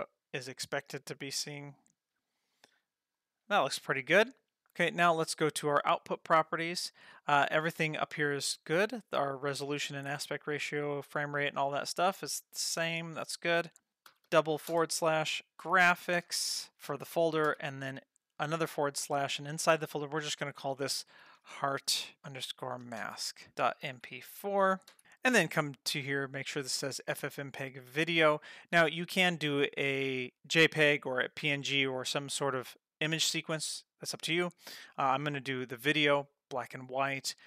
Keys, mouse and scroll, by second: 0.5 click, 1.0 F12, 1.8 click, 2.2 F12, 3.1 click, 3.5 F12, 4.6 scroll down 3, 5.8 click, 11.8-13.9 scroll down 3, 13.9 click, 14.3 /, 15.5-25.0 drag, 26.4-34.4 drag, 36.4 click.